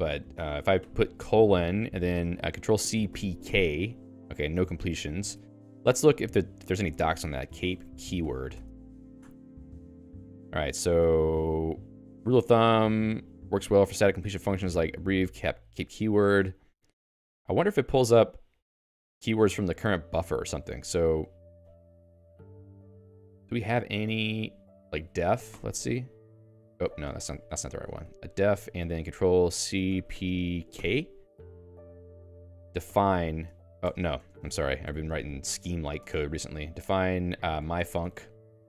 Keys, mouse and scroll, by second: 0.8 shift+;, 4.9 BackSpace, 5.3 Escape, 19.6 Escape, 21.0 k, 21.7 ctrl+u, 21.8 ctrl+u, 22.0 ctrl+u, 22.6 ctrl+d, 23.2 ctrl+u, 23.4 ctrl+d, 23.6 ctrl+d, 23.9-25.5 typing, 26.9 ctrl+g, 27.5 ctrl+g, 28.0 a, 31.8-36.0 typing, 37.0-38.6 typing.